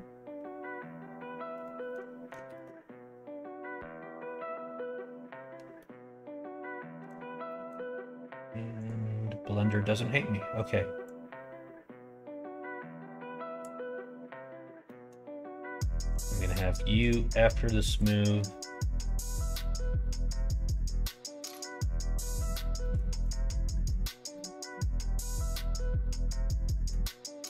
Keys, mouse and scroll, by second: 5.7-7.1 middle drag, 7.4 middle click, 8.8 click, 11.0-13.6 drag, 14.8 middle click, 16.1 click, 17.9 click, 18.3-19.6 middle drag, 20.3 click, 21.0 right click, 22.2 middle click, 22.8 middle click, 23.2 click, 23.6 middle click, 24.3 middle click, 25.5-26.8 middle drag.